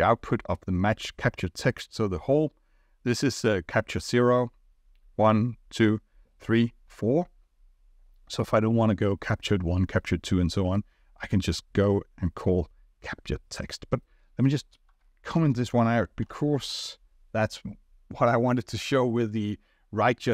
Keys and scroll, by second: 15.3 ctrl+/, 16.2 ctrl+r.